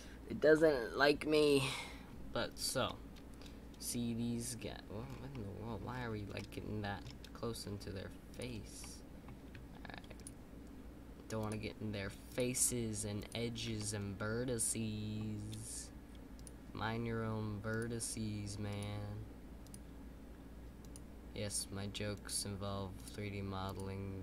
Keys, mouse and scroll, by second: 2.8 scroll up 1, 2.8-5.0 middle drag, 5.0 scroll down 4, 5.3 middle click, 5.9-6.3 scroll up 2, 6.3 middle click, 7.1-8.3 scroll down 1, 8.8-10.1 middle drag, 10.1-13.7 shift+drag, 13.7-16.3 middle drag, 16.3-24.2 shift+drag.